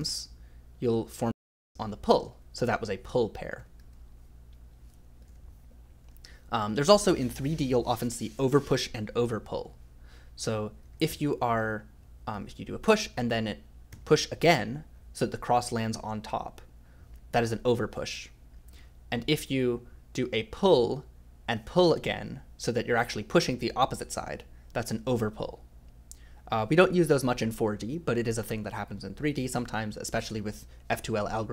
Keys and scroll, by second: 0.0-2.2 typing, 3.3-4.3 typing, 9.6-12.8 typing, 13.9 i, 18.4-21.4 typing.